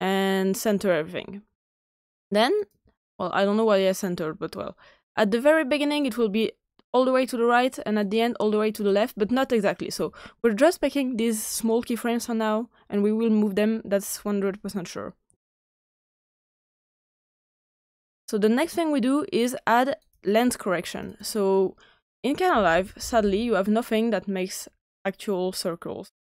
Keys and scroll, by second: 22.2-23.6 typing.